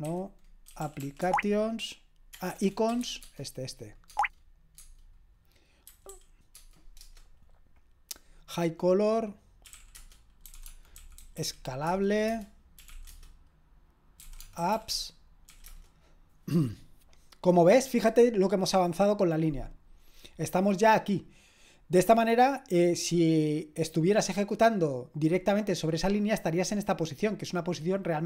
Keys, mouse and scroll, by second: 0.0-7.0 typing, 9.4-16.0 typing.